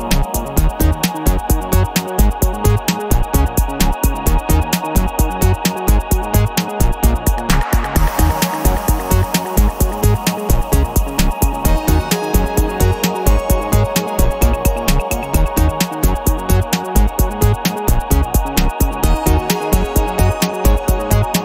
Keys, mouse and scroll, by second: 0.6 click, 2.4-4.0 drag, 4.7 click, 5.5 click, 6.8-8.8 drag, 9.2 click, 9.7 click, 10.2-12.1 middle drag, 12.6 ctrl+click, 13.2 ctrl+click, 13.8 ctrl+click, 15.1 click, 17.0 click, 18.3 click, 20.0 click, 20.6 click, 21.0-21.4 middle drag.